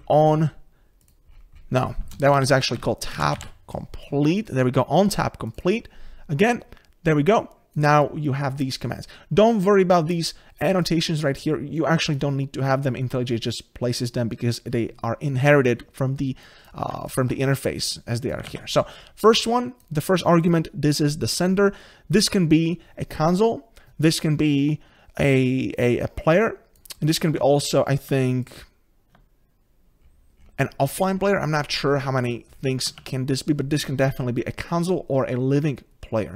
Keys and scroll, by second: 17.2 ctrl+b, 28.6 ctrl+b.